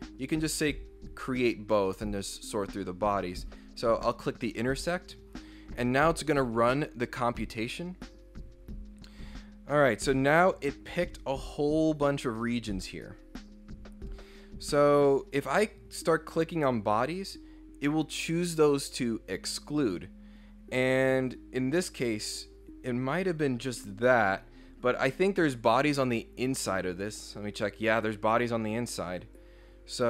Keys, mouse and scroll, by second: 3.9 click, 11.0-15.1 drag, 17.0 click, 21.5 scroll down 1, 22.3 scroll down 1, 26.7 click, 29.2 click.